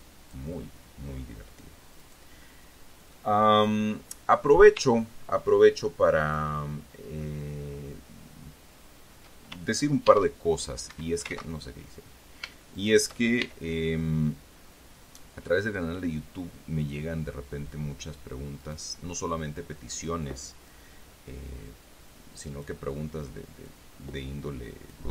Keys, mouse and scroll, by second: 2.3 right click, 3.4 click, 6.6 shift+right click, 10.4 shift+e, 11.2 Escape, 11.7 ctrl+z, 13.1 shift+right click, 13.7 shift+e, 17.2 click, 18.9 right click, 19.9 click, 21.0-23.2 drag, 24.0-25.1 drag.